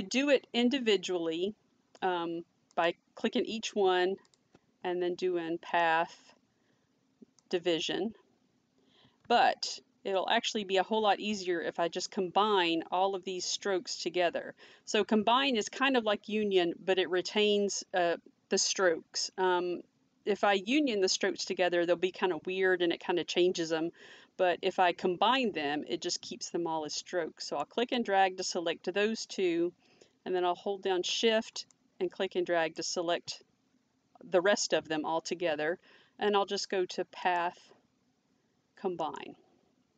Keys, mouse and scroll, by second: 2.7 click, 4.3 click, 5.6 click, 9.2 ctrl+z, 25.4 click, 31.8 click.